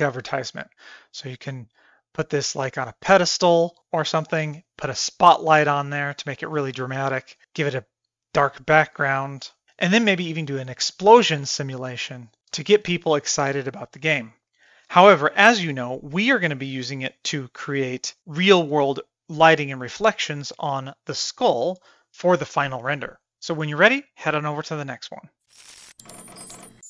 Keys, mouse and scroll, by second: 0.5 shift+middle drag, 1.0 middle drag, 1.8 middle drag, 2.3 middle click, 2.8-3.3 shift+middle drag, 3.5 middle click, 6.3 shift+middle drag, 7.1 shift+middle click, 12.6 shift+middle click, 12.9 middle click, 13.5 shift+middle click, 14.0 middle click, 14.3 middle click.